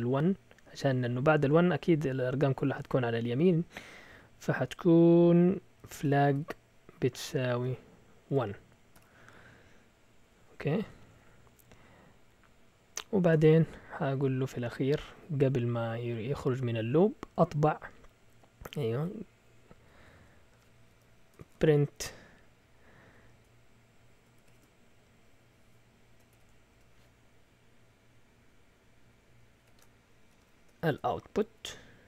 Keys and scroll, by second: 5.5-8.9 typing, 10.2 Down, 10.4 Down, 10.5 Down, 10.6 Down, 10.8 Down, 11.0 Down, 11.3 Down, 12.9 Down, 13.1-13.8 typing, 15.5-17.0 typing, 18.1 typing, 20.0 typing, 21.1-22.1 typing, 24.4 typing, 26.3 typing, 30.1-32.0 typing, 30.8 shift+Tab.